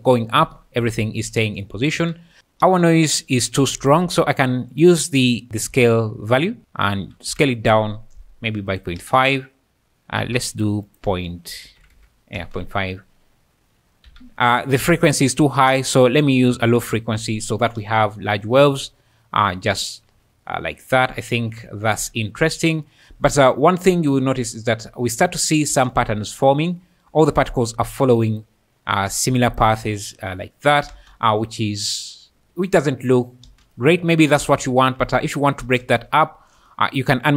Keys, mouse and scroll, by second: 2.0 Escape, 2.4 space, 2.8 space, 4.0 shift+d, 4.3 click, 4.8 click, 6.3-7.3 drag, 8.7 shift+click, 9.0 space, 10.2 Escape, 10.5 click, 10.9-11.9 drag, 12.4 space, 14.1 Escape, 15.8-16.8 drag, 17.8 space, 20.7 `, 21.0-21.5 scroll, 21.6 `, 21.7 `, 23.2 `, 24.1-24.9 `, 25.1 `, 25.7 space, 26.4 click, 30.9 space, 33.5 space, 34.1 `, 34.3 space, 35.8 space, 35.8 `.